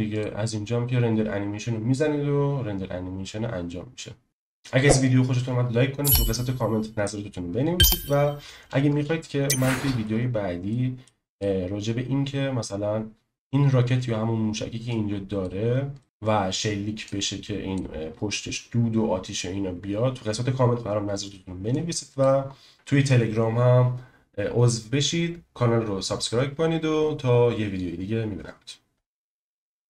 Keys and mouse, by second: 0.1-1.3 drag, 8.9 space, 9.6 middle click, 10.7-11.1 drag, 11.3 click, 13.3 ctrl+z, 16.0 middle click, 16.0 ctrl+z, 17.1 click.